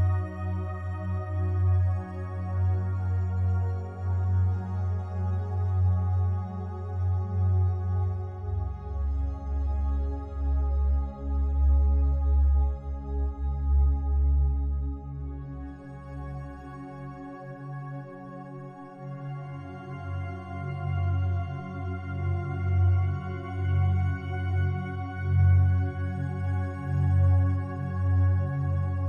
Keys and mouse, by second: 0.6-1.5 drag, 2.0 shift+s, 2.9 shift+s, 3.7-4.6 shift+drag, 4.9-6.6 drag, 6.6 s, 7.5 Escape, 8.5-12.0 drag, 13.1 i, 13.8 click, 15.1-18.6 drag, 19.7 Right, 20.8 i, 21.3-21.8 drag, 22.3 Right, 22.5 Right, 22.6 Right, 22.8 Right, 22.9 Right, 23.7 i, 24.1 click, 25.3 click, 26.4 s, 27.4 click, 28.7 i.